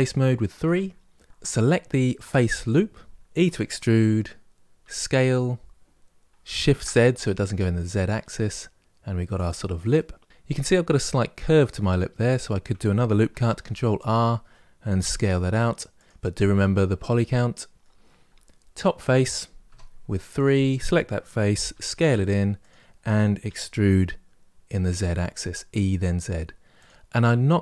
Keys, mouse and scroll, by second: 0.4 3, 2.4 alt+click, 3.2 e, 9.7-13.3 middle drag, 13.3 ctrl+r, 14.8 s, 17.1-19.4 middle drag, 19.4 3, 20.1 click, 21.5 s, 23.2 e, 26.9-27.6 middle drag.